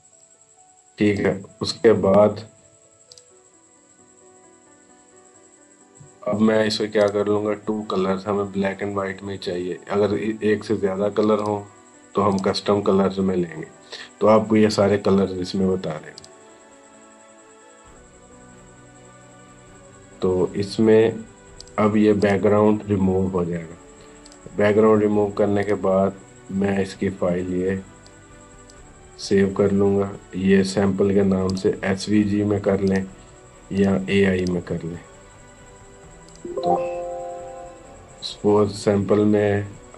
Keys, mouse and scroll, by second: 6.8 click, 11.2 click, 16.0 click, 21.4 click, 27.9-31.0 drag, 31.3 click, 39.8 click.